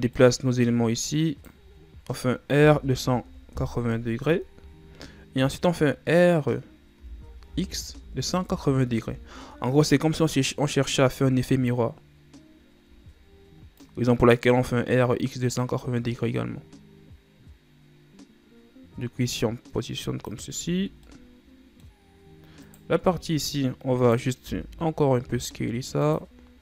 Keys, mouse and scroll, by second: 0.3-1.9 drag, 1.9-2.7 ctrl+scroll up 1, 2.7 r, 7.1 r, 11.1-13.1 ctrl+scroll down 3, 13.1-13.9 ctrl+scroll up 1, 13.9-16.9 drag, 20.7 Tab, 21.0 scroll down 3, 21.2-22.2 middle drag, 22.2-22.7 scroll up 2, 22.7 right click, 23.1 Tab, 24.2 right click, 24.6 l, 25.3 s.